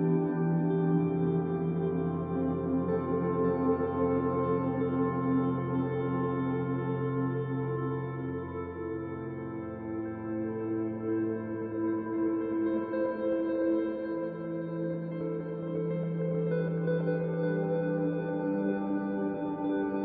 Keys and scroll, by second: 2.2 f, 4.9 b, 11.3 e, 13.8 b, 19.9 ctrl+alt+1.